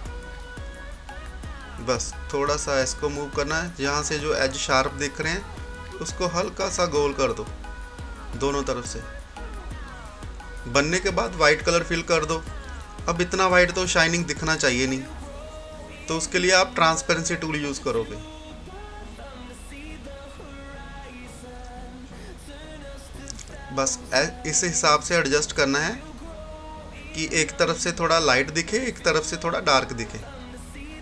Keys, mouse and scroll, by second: 3.3 scroll up 1, 4.6-9.9 drag, 9.9 scroll down 1, 11.5 click, 12.1 typing, 15.4 right click, 17.1-28.1 drag, 17.9-18.7 typing, 28.1 scroll up 1, 29.3-31.0 drag, 30.1 typing.